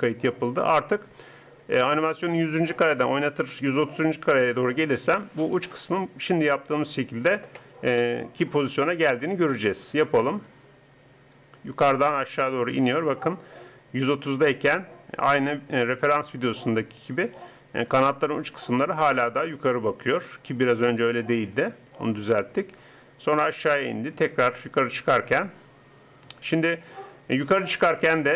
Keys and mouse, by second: 10.3-12.3 drag.